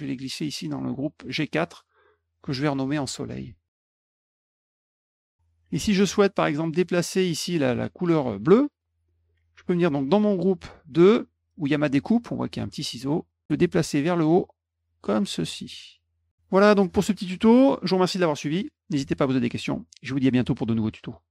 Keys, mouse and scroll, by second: 1.9 click, 2.1 click, 2.6-4.0 typing, 4.0 click, 4.5 middle click, 6.3 click, 7.2 click, 10.5 click, 12.8 click, 13.8-15.1 drag, 15.8 click, 21.2 Tab.